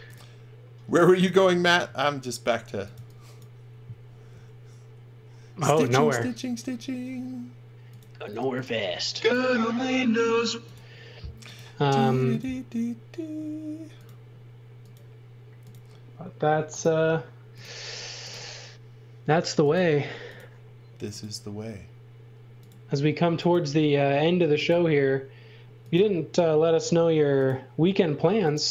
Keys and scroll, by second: 1.8-4.3 typing, 6.1 l.